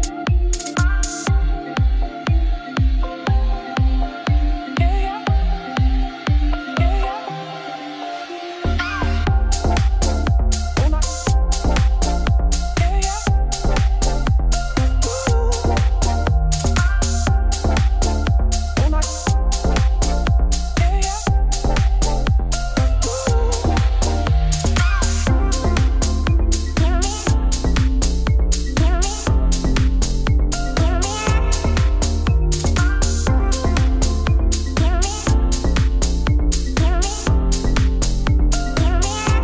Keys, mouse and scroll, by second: 0.0 middle click, 0.5 KP_Decimal, 0.9 middle click, 1.3 e, 4.8 ., 5.4 s, 6.5 middle click, 6.8-7.2 scroll up 1, 7.2 e, 8.6 middle click, 8.7 scroll down 3, 9.1 scroll up 2, 9.3-10.5 middle drag, 11.0 ctrl+KP_Add, 11.1 ctrl+KP_Add, 12.1 click, 12.6 click, 13.6 middle click, 14.4 g, 16.0 Tab, 16.3 ctrl+2, 16.7 right click, 17.1 middle click, 17.6 scroll down 4, 18.0-18.5 scroll up 6, 18.5 scroll down 1, 18.7 Tab, 19.1 middle click, 19.3 1, 19.6 KP_1, 21.1-21.9 scroll up 1, 21.9 z, 22.4 shift+middle click, 22.6 click, 23.6 x, 25.0 scroll up 3, 25.3 scroll down 3, 25.6 ctrl+z, 25.8 scroll down 2, 26.2 click, 27.5 scroll up 3, 28.1-28.4 scroll down 5, 28.4 x, 29.4 click, 30.6 scroll up 1, 30.8 x, 32.4 click, 33.1 shift+click, 33.4 g, 34.4 shift+middle click, 34.7 click, 34.9 shift+click, 35.2 g, 36.6 shift+middle click, 37.2 scroll up 4, 37.5 2, 37.7 alt+click, 38.0 alt+click, 38.6 f, 39.1 alt+click.